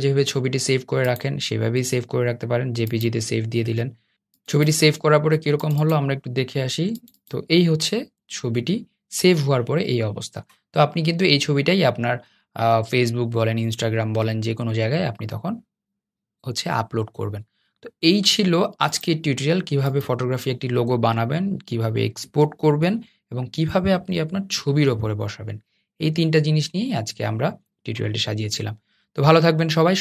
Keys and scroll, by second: 17.2 super+z, 17.4 Escape.